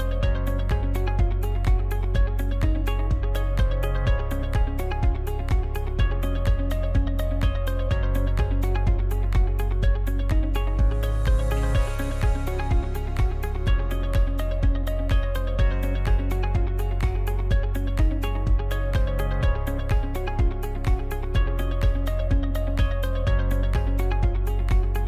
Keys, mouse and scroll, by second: 0.0 ctrl+r, 2.1 right click, 2.7 shift+right click, 3.5 f, 4.2 right click, 5.0 shift+right click, 5.8 f, 6.3-7.9 shift+middle drag, 7.9 right click, 9.1 KP_Decimal, 9.7-10.6 middle drag, 10.6 shift+right click, 11.4 f, 11.6-12.0 middle drag, 12.0-12.6 scroll up 1, 12.6 right click, 13.4 shift+right click, 14.3 ctrl+z, 14.8-15.8 middle drag, 15.8 shift+right click, 16.6 f, 17.4 alt+right click, 17.9 scroll down 2, 18.2-18.7 middle drag, 18.7-19.0 scroll down 2, 19.0-19.7 shift+middle drag, 19.7 scroll down 2, 19.9 f, 20.5-22.9 shift+middle drag, 22.9-23.4 scroll down 1, 23.4-24.9 shift+middle drag, 24.9 right click.